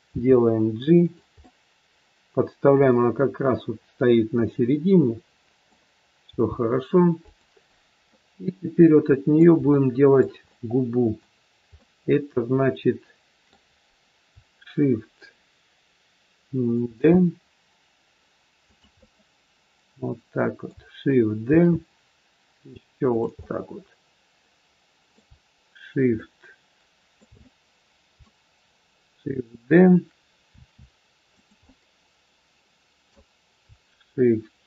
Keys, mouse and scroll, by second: 0.0 g, 1.4 middle click, 6.3 g, 8.0 middle click, 9.8 shift+middle click, 10.3 scroll up 1, 10.4 middle click, 11.6 middle click, 12.6 shift+middle click, 16.9 shift+d, 18.9 middle click, 21.4 shift+d, 23.4 middle click, 26.1 shift+middle click, 27.4 middle click, 30.4 shift+d, 31.5 middle click.